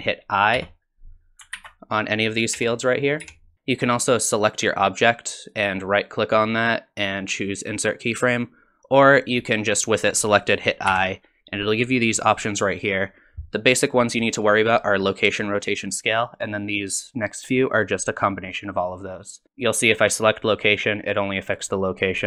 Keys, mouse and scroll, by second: 0.6 i, 1.6 ctrl+z, 2.6 i, 3.2 i, 4.6 click, 5.4 right click, 10.9 i.